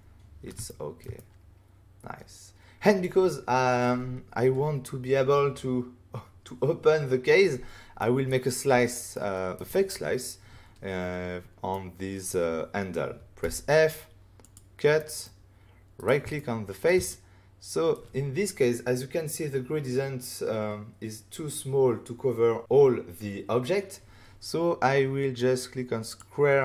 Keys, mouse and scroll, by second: 0.6 ctrl+middle click, 1.0 middle click, 1.1 middle click, 7.9 middle click, 9.1 middle click, 11.6 middle click, 13.4 f, 14.4 click, 14.9 middle click, 15.9 right click, 16.4 shift+middle click, 17.0 middle click, 26.0 click.